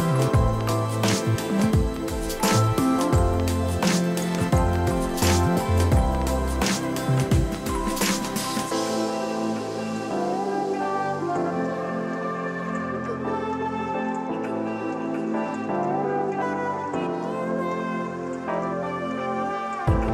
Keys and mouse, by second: 0.1 click, 0.7 Escape, 1.0 click, 2.2 ctrl+click, 2.6 ctrl+click, 3.0 ctrl+click, 4.6 ctrl+click, 7.4 click, 10.9 Return, 12.0 y, 12.4 click, 12.9 y, 13.5 click, 14.0 ctrl+click, 14.5 click, 17.9 click, 19.1 Delete.